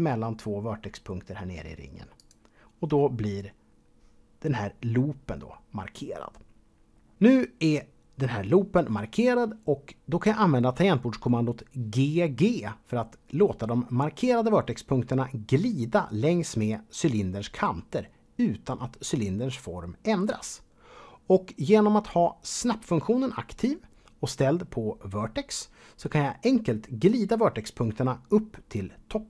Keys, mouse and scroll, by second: 2.1 alt+click, 4.4-5.1 scroll down 3.